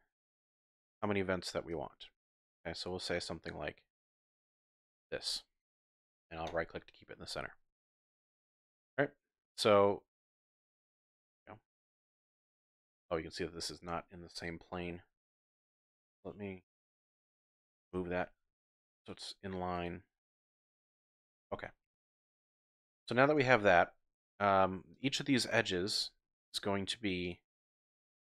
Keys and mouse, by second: 6.4 click, 6.5 typing, 7.9 z, 8.8 middle click, 9.3 z, 12.2 click, 13.5 Tab, 15.6 KP_1, 16.7 shift+drag, 17.9 g, 18.3 x, 19.7 click, 20.3-20.9 drag, 21.3 KP_Decimal, 22.0 drag, 23.4 Tab, 24.9 click, 26.4 shift+click, 27.2 shift+click, 27.9 shift+click.